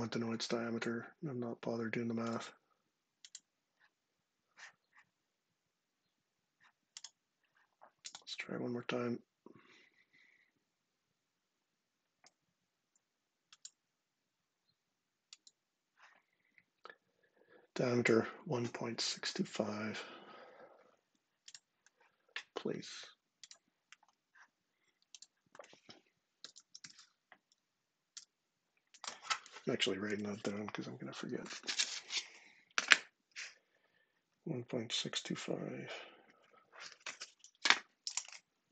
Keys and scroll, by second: 20.7 ↻, 25.9-27.0 typing, 27.9 Return.